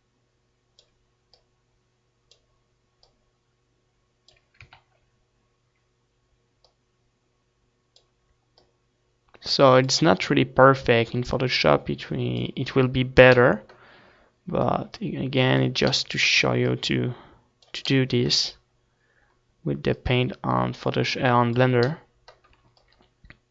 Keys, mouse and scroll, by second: 4.4 ctrl+z, 6.2-21.3 drag, 22.7-23.5 drag.